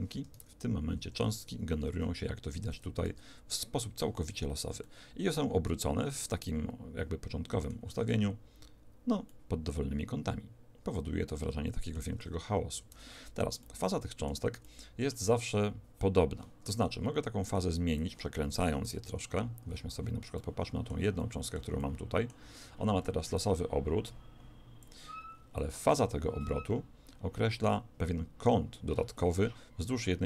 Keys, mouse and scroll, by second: 0.3 alt+a, 1.0 Escape, 2.5 alt+a, 3.9 alt+a, 4.9-7.0 middle drag, 8.0 alt+a, 9.3-12.5 middle drag, 12.7 Escape, 13.6-16.5 middle drag, 17.5-19.5 drag, 18.5 Escape, 18.9 shift+Left, 20.4-23.3 middle drag, 23.3 click, 25.6 click.